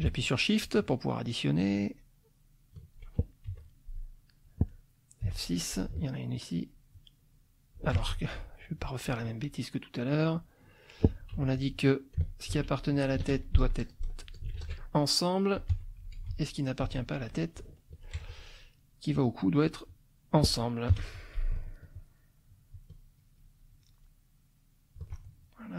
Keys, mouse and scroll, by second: 0.8-2.9 shift+drag, 3.5 F2, 3.9 click, 4.7 middle click, 5.2 F6, 5.4 click, 6.4-8.0 shift+drag, 8.0 ctrl+shift+z, 8.8-10.5 drag, 10.8 click, 11.3 F2, 11.5 click, 12.5 ctrl+c, 12.9 ctrl+click, 13.3-14.6 ctrl+shift+drag, 14.4 ctrl+shift+v, 16.2 F1, 16.3 Page_Down, 16.8 F2, 17.9 ctrl+alt+click, 18.8 ctrl+alt+click, 19.8 click, 20.9 F6, 21.9-25.1 shift+drag, 25.4 shift+click.